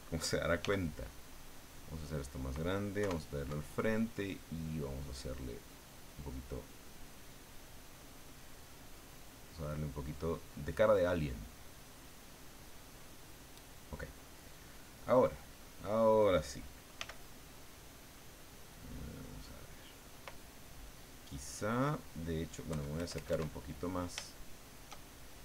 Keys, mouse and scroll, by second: 0.6 f, 1.7 click, 3.0 KP_1, 4.5-6.6 drag, 7.3-8.7 drag, 8.9 click, 10.1 click, 11.0-13.8 middle drag, 14.7 click, 15.5 click, 17.0 f, 19.0 click, 22.7 KP_Add, 24.3 shift+click.